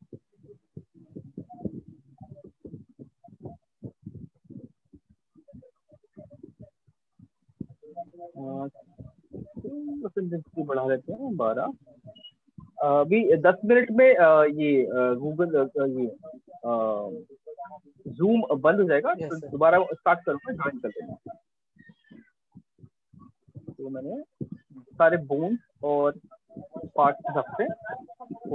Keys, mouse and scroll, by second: 3.7 click, 7.9 click, 10.1 click, 11.5 alt+click, 13.7 click, 17.7 click, 20.9 click, 22.0 alt+click, 22.9 alt+click, 24.9 click, 26.3 click, 27.9 click.